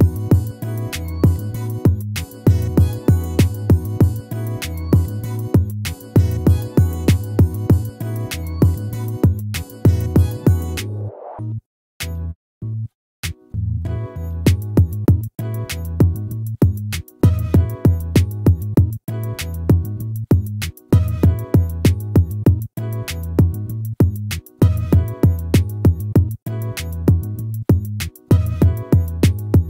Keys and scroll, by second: 8.3 ctrl++.